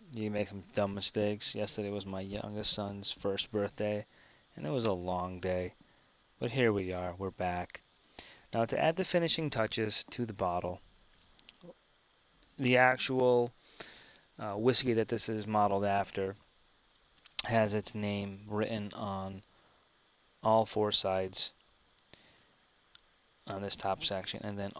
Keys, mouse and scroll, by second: 10.5 KP_1.